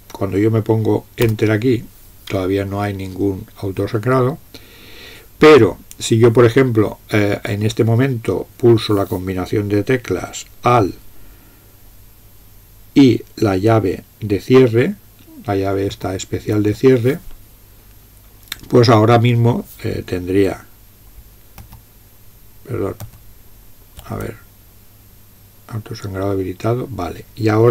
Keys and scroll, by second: 1.4 Return, 16.0 alt+}, 21.6 alt+}, 23.1 alt+{.